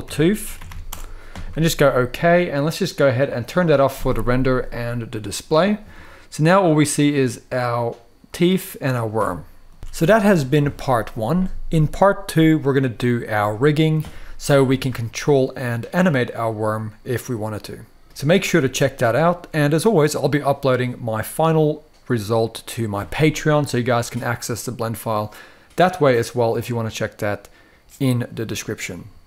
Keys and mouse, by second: 0.2 o, 3.9 click, 5.2 click, 5.7-6.5 middle drag, 8.6 click, 9.0-9.4 middle drag, 9.8 alt+a, 9.8-10.1 shift+middle drag, 9.8 KP_3, 9.8 KP_1, 14.9-15.9 middle drag, 16.9-18.0 middle drag, 18.3-19.1 middle drag.